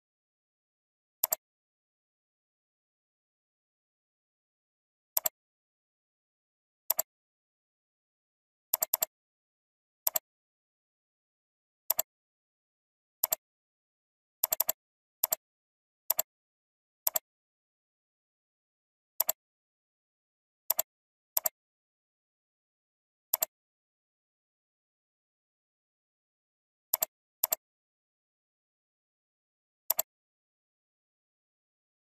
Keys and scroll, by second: 4.2 ctrl+v, 23.5 alt+Up, 25.0 alt+Down.